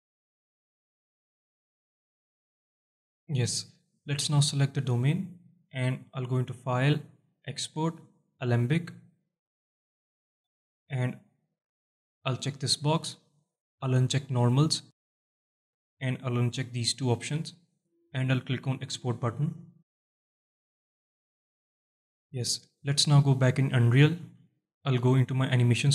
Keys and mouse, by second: 3.2 shift+Left, 4.1 alt+shift+drag, 6.6-8.6 drag.